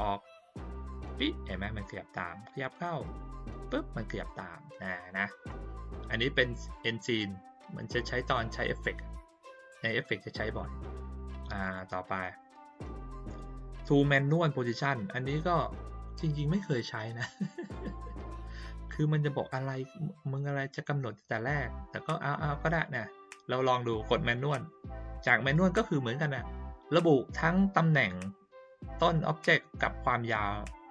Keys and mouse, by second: 2.4-3.1 drag, 6.7-7.1 drag, 11.6 click, 18.3-18.9 drag, 25.1 click.